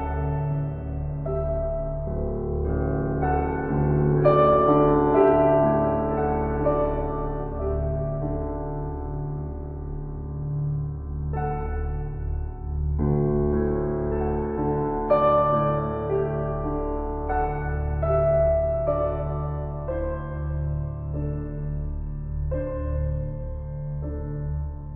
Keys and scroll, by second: 4.2 [, 19.2 ctrl+g.